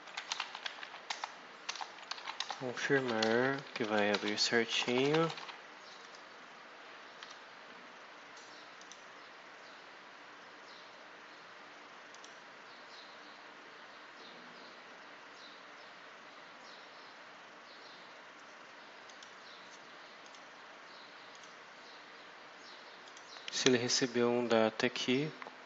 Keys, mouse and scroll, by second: 0.0-5.8 typing, 2.3 Return, 6.1-6.4 scroll down 2, 7.1 F5, 8.7 click, 12.0 click, 18.9 click, 20.1 click, 21.2 click, 22.9 click, 23.8 scroll up 1, 25.0 click.